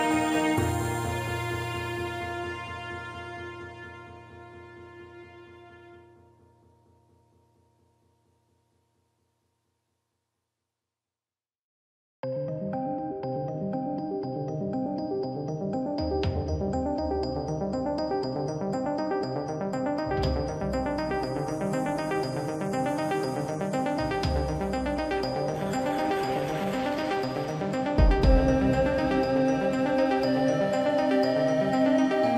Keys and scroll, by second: 27.5 ctrl+z.